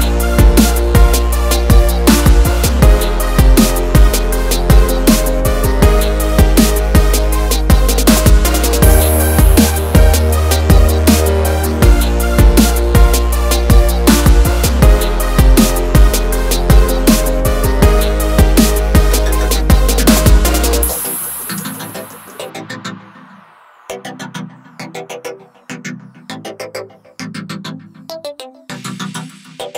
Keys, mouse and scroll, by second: 2.0 click, 4.1 click, 4.7 scroll up 1, 7.0 scroll down 1, 7.9-8.5 scroll up 1, 8.7 ctrl+click, 11.7 click, 13.3 click, 15.0 click, 16.8 click, 17.2 double click, 17.9 scroll up 1, 20.5 click, 23.9 right click, 26.1 right click, 28.7 click.